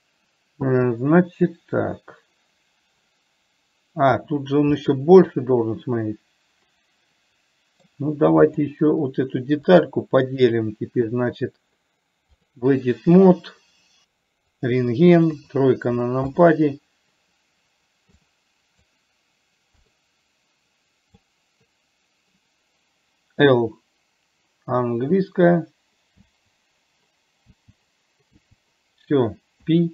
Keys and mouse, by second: 1.1-4.5 middle drag, 5.2-8.1 middle drag, 8.9 click, 10.2-13.0 drag, 15.6 KP_3, 16.7 click, 18.6 click, 20.2-21.6 drag, 26.6 l, 28.7 l.